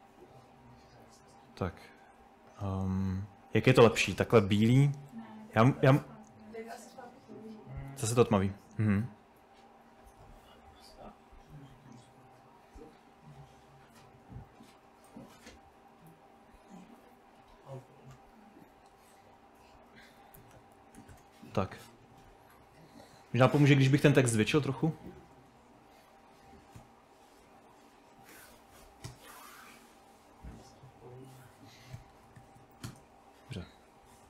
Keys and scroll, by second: 5.6 typing, 16.5 Escape, 16.9 Escape, 20.0-22.1 typing.